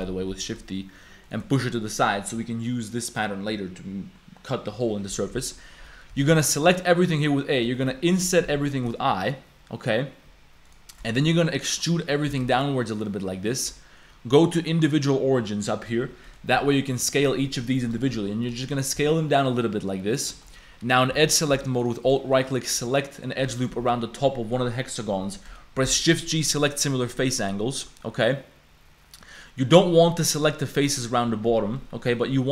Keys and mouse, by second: 1.9 click, 3.1-4.9 drag, 5.0 click, 5.3 Tab, 6.1 a, 6.3 a, 6.6 shift+click, 7.1 click, 7.7 shift+click, 8.9 i, 10.9 shift+click, 11.3 click, 11.9 click, 12.3 e, 14.6-15.7 drag, 16.3 click, 16.3 right click, 16.5 s, 18.6 shift+click, 19.0 s, 20.4 shift+click, 21.1 2, 21.9 alt+click, 22.2 shift+click, 23.5 shift+click, 25.8 shift+g, 28.0-29.3 drag, 29.3-32.2 middle drag.